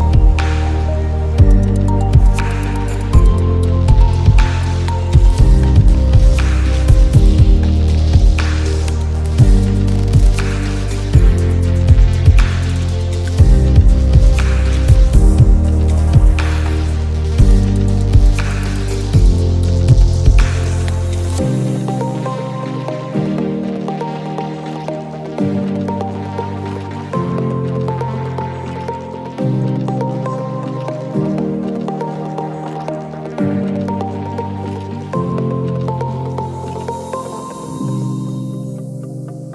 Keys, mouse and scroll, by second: 9.3 ctrl+g, 9.8 right click, 11.3 click, 11.8 ctrl+z, 12.8 right click, 13.6 click, 14.4 right click, 15.0-20.1 drag, 20.1 alt+scroll up 1, 20.3 space, 20.4 click, 20.8 space, 22.0 alt+scroll up 1, 23.7-26.5 shift+drag, 26.5 space, 26.8-28.0 drag, 26.8 space, 33.5-33.8 alt+scroll down 1, 33.9-36.1 typing, 34.1 click, 34.7 alt+scroll down 2, 35.0 click, 35.9 click, 37.7 alt+scroll up 2, 37.9 space, 38.0 click, 38.2 space.